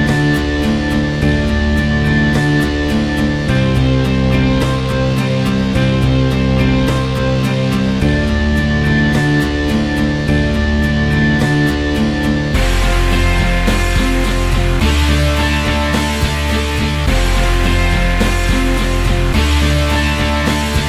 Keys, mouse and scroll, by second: 0.0 alt+middle click, 0.1 alt+click, 0.2 alt+middle drag, 0.4 alt+click, 1.0 alt+middle click, 1.2 alt+click, 1.4 alt+right click, 1.7-2.5 alt+middle drag, 2.5 alt+right click, 3.2 alt+middle click, 4.1 click, 4.4 middle click, 4.4 z, 5.2 middle click, 5.2 t, 5.9 alt+middle click, 6.7 click, 6.9 middle click, 7.0 ctrl+alt+s, 7.4 middle click, 7.6 click, 7.7 g, 8.0 middle click, 8.2 g, 8.3 ctrl+right click, 8.6 click, 9.5 middle click, 9.6 scroll up 4, 9.8 middle click, 10.0-11.9 drag, 11.9 middle click, 12.8 click, 13.1 middle click, 13.2 shift+a, 13.9 scroll down 10, 14.2 click, 14.9 middle click, 15.0 shift+a, 15.9 middle click, 16.0 ctrl+alt+s, 16.3 KP_Decimal, 16.5-16.8 alt+drag, 16.8 alt+middle click, 17.9 alt+click, 18.1 alt+middle click, 18.2 alt+click, 18.4 alt+middle click, 18.6 g, 18.8-20.2 drag, 20.2 alt+middle click, 20.4-20.8 alt+drag.